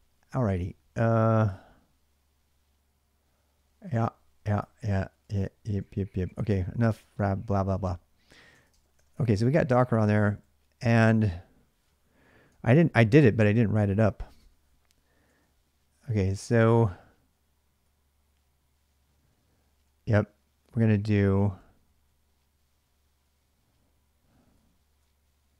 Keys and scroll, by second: 0.0-1.8 typing, 3.5-6.7 typing, 8.2-15.8 typing, 17.7-18.1 k, 19.6-22.7 typing.